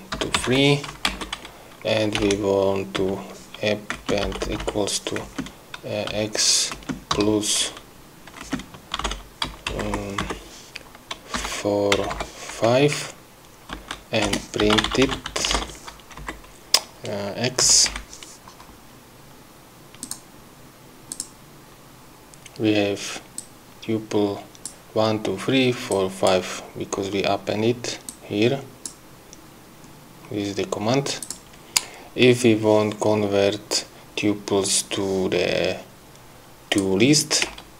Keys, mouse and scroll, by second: 0.0-1.4 typing, 2.6 Return, 3.4-7.2 typing, 8.9 space, 10.1 Left, 10.6 Right, 11.8-13.0 typing, 14.1 Right, 14.6 Return, 14.8-16.1 typing, 16.6 Left, 18.0 x, 18.3 End, 20.4 click, 21.5 click, 23.8-25.2 drag, 26.3 click, 28.5 click, 30.6 scroll down 2, 31.6 click, 37.1 click.